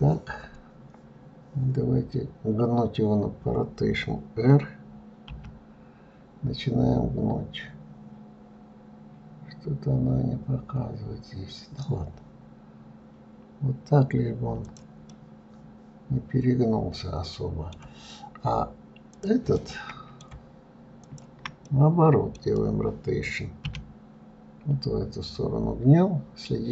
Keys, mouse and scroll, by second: 15.3-18.3 middle drag, 19.4 click, 19.8-21.2 middle drag, 21.2 shift+click, 21.9-23.9 middle drag, 23.9 r.